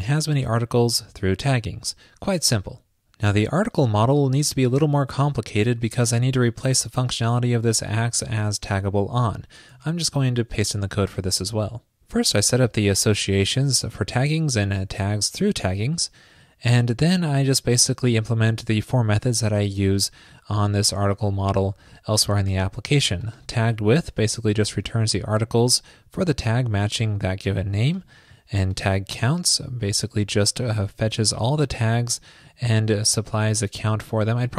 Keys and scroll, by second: 2.2 super+s, 10.5 super+v.